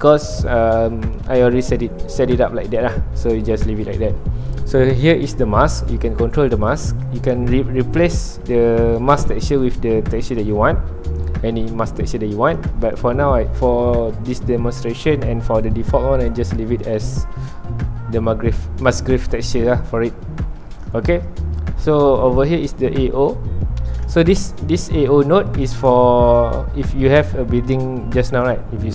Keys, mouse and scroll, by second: 7.8 click, 24.1-26.7 drag, 26.7 scroll down 1, 26.9-28.8 middle drag, 28.8 /.